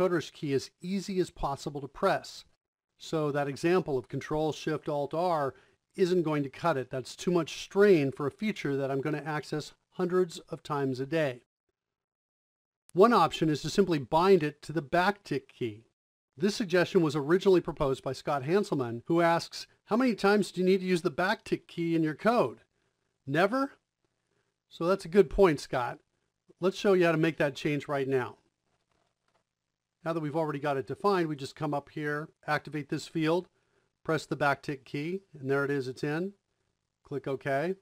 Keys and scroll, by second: 28.2 Left, 28.2 Right, 28.2 r.